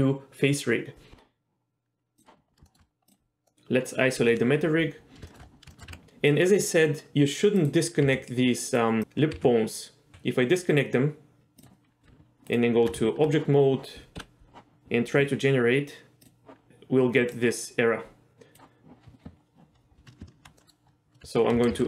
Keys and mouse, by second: 2.7 shift+middle drag, 3.1 click, 3.5 middle click, 4.3 KP_Divide, 5.3 shift+middle click, 5.8 shift+middle click, 5.9 Tab, 6.4 middle click, 8.1 g, 9.0 click, 9.4 g, 10.1 g, 12.1 Tab, 13.1 Tab, 16.4-18.7 drag, 20.6 middle click, 21.8 ctrl+z.